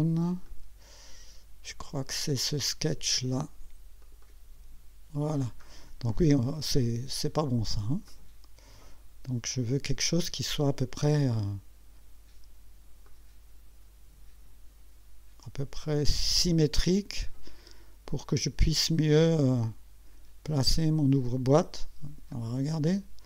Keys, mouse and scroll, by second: 0.5 click, 1.8 click, 3.4 click, 4.0 click, 5.6 scroll down 2, 5.9 scroll up 2, 8.1-9.8 drag, 13.1-16.6 drag, 20.4-21.6 drag, 22.3 click.